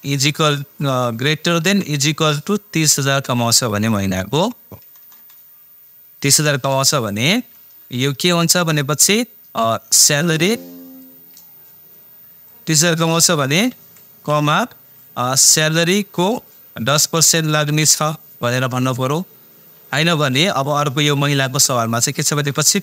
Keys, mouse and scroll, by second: 1.6 shift+., 2.1 =, 7.5 =, 8.4 shift+0, 10.0 click, 13.7 Right, 14.3 ,, 15.6 click, 17.7 shift+5, 20.3 ,.